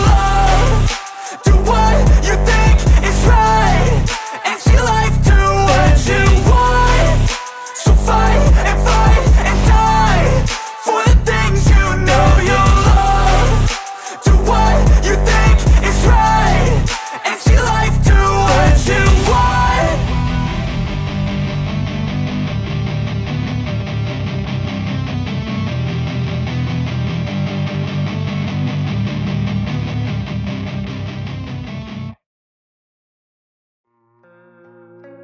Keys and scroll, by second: 0.3 Return, 0.8-4.5 typing, 0.9 Return, 4.8 Down, 5.0 Return, 5.8 End, 6.0 Return, 7.5-8.7 typing, 9.3 Return, 9.8 End, 10.1 Return, 14.2-15.5 typing, 15.7 Return, 16.3 Return, 16.6 ctrl+s, 21.8 Return, 21.9 Return, 22.2-24.9 typing, 24.5 End, 25.1 Return, 26.2-27.1 typing, 28.4-35.2 typing, 33.1 Down, 33.3 Return.